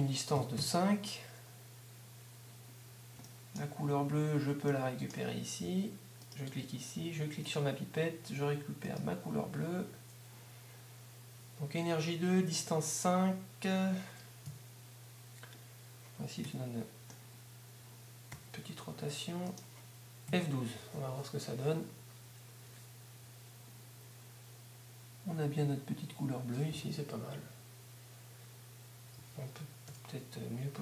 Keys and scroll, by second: 0.6 Home, 16.0 3, 20.3 F12, 29.2 Escape.